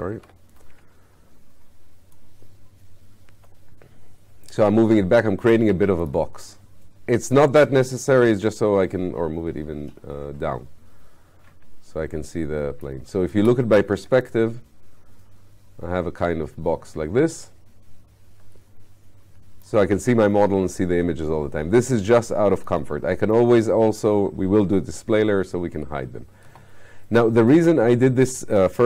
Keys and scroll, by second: 13.3 space.